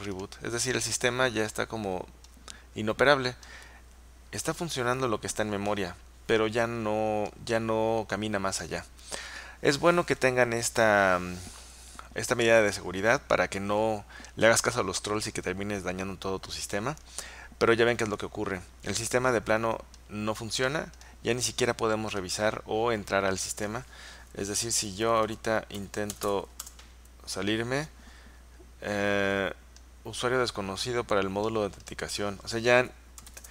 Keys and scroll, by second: 24.9 Return, 25.1 Return, 25.2 Return, 25.4 Return, 25.6-26.9 typing, 33.1-33.5 typing.